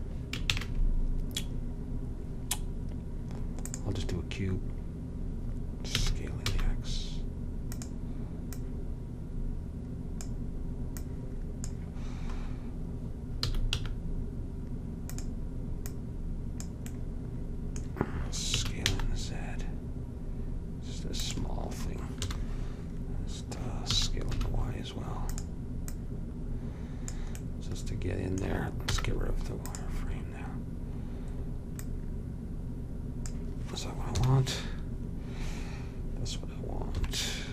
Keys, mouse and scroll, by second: 0.7 shift+a, 6.1 s, 8.7-10.6 drag, 11.1-12.6 drag, 12.6-13.6 middle drag, 13.6 s, 16.1-17.8 drag, 17.8 middle click, 18.6 s, 22.3 KP_7, 24.1 s, 26.0-27.9 drag, 29.0 z, 32.0-33.8 drag, 34.2 KP_7, 37.1 KP_3.